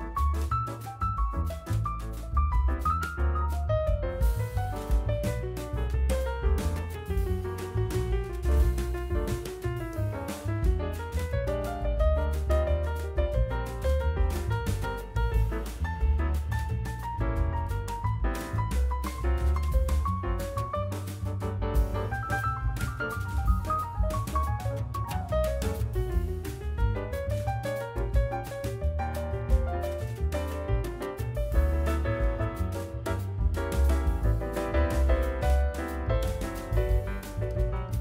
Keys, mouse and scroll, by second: 1.2-2.6 drag, 2.6 ctrl+z, 3.5 g, 4.2 click, 4.8 g, 5.5 click, 6.5 click, 6.9 middle click, 7.9 click, 9.1 Tab, 9.6 KP_1, 10.1 g, 13.9 click, 14.5 g, 16.9 middle click, 17.6 Tab, 18.0 scroll down 1, 18.2-19.0 middle drag, 19.0-19.6 drag, 19.6-20.1 middle drag, 20.1 Tab, 20.4 click, 21.2 3, 21.3 click, 21.7 scroll down 1, 21.7 middle click, 22.5 KP_1, 25.0 middle click, 25.6 e, 27.2 middle click, 27.8 Tab, 27.9 scroll down 2, 28.1-28.6 middle drag, 29.1-29.9 right drag, 29.9 scroll up 2, 30.1-30.4 middle drag, 31.4 ctrl+z, 31.6 ctrl+z, 31.7 ctrl+z, 32.0 ctrl+z, 32.3 middle click, 32.8 scroll up 1, 33.1 click, 33.8 shift+click, 34.5 e, 35.7 scroll down 1, 35.9 middle click, 36.3 ctrl+z, 36.8 e.